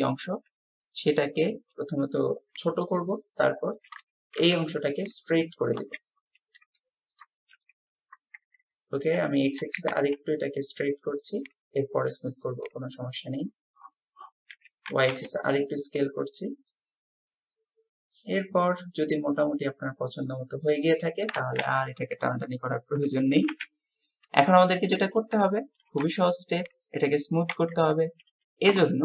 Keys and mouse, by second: 2.5-4.0 drag, 6.8-7.2 shift+middle drag, 16.2-17.6 drag, 17.6-18.9 middle drag, 19.4-21.3 middle drag, 21.8 middle click, 22.5 click, 23.6 KP_7.